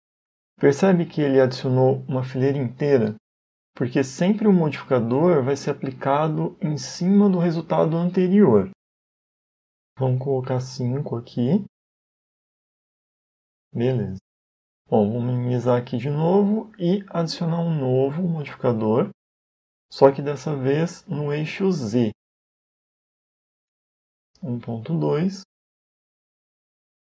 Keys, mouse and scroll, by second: 1.7 middle click, 11.8 click, 12.2 click, 12.9 click, 13.3-13.7 scroll down 3, 13.8 shift+middle click, 14.3 middle click, 17.0 click, 17.9 click, 21.5 click, 23.6 click.